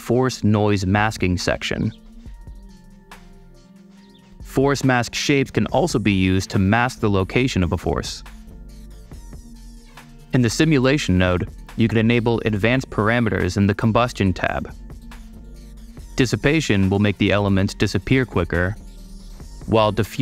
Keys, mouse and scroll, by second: 0.2-0.9 super+drag, 1.2-1.6 super+drag, 2.1 super+click, 3.1-4.3 super+drag, 4.5 click, 5.6 click, 6.8 click, 8.3 click, 10.9 super+click, 12.9 super+click, 13.7 super+click, 19.5-20.2 super+drag.